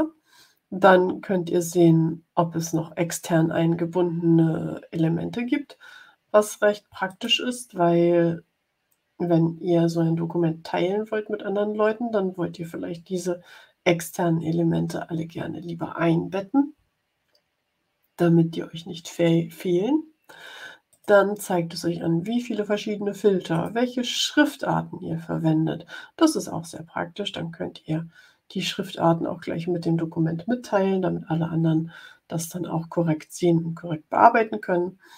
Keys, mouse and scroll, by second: 7.0 click, 20.8 click, 23.4 click.